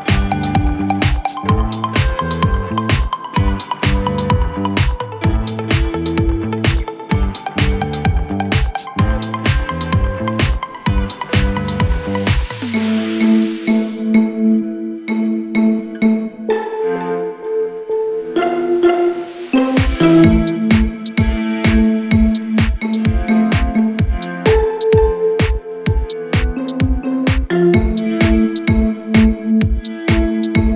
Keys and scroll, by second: 14.9 F3, 18.7 Caps_Lock, 25.0-28.0 typing, 29.6 Return, 29.8-30.7 typing.